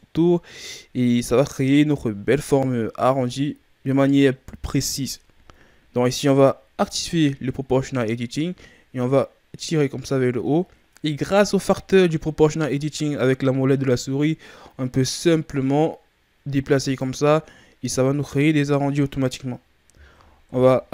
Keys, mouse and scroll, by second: 6.7 click, 8.9 click, 17.8-19.0 scroll down 2, 20.4 KP_1.